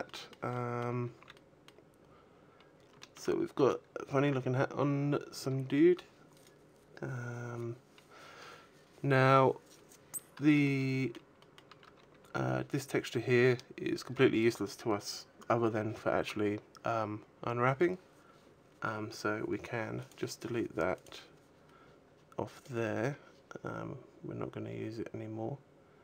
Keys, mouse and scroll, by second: 0.3 middle click, 0.8 scroll down 1, 1.0 a, 1.3 middle click, 1.9-2.4 scroll up 2, 2.4 scroll down 1, 2.8 shift+middle click, 3.0 middle click, 3.9-4.6 scroll up 5, 6.1 right click, 7.4 scroll down 3, 8.0 scroll down 2, 9.7-10.2 scroll down 4, 10.2 shift+middle click, 11.0 shift+middle click, 11.6-12.4 scroll up 2, 14.5-15.1 scroll up 1, 19.8 click, 20.7 click.